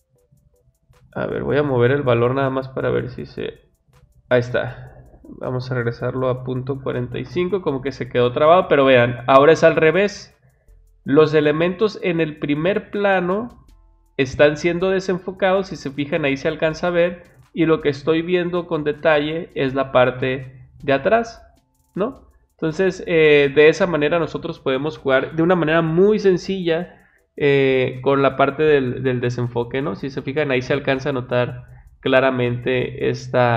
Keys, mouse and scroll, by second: 1.8 click, 5.3 click.